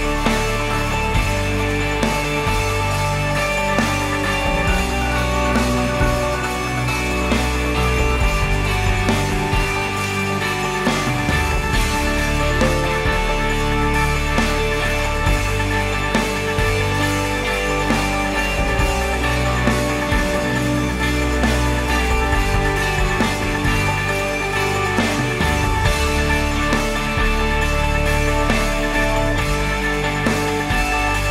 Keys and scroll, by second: 5.3 ctrl+s.